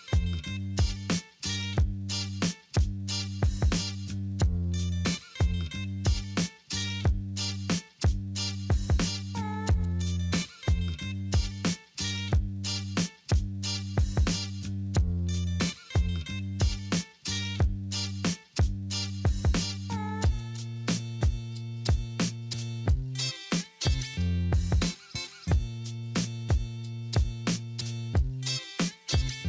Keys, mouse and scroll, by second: 5.5 2, 5.6 Return, 6.8 1, 7.1 Return, 8.2 3, 8.5 Return, 9.3-11.6 typing, 9.5 Return, 10.4 Return, 11.2 Return, 11.9 Return, 13.8 alt+middle click, 14.6 alt+middle click, 14.9 alt+middle click, 17.8 2, 17.9 Return, 21.2 middle click, 21.7-22.2 scroll down 2, 22.2 middle click, 22.9 ctrl+right click, 24.4 ctrl+right click.